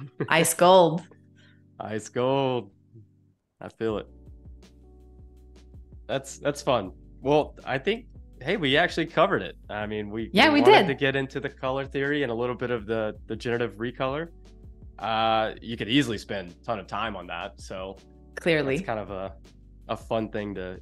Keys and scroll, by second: 2.6 z, 5.2 space, 6.6 super+-, 7.5 v, 7.9 space, 9.7 space.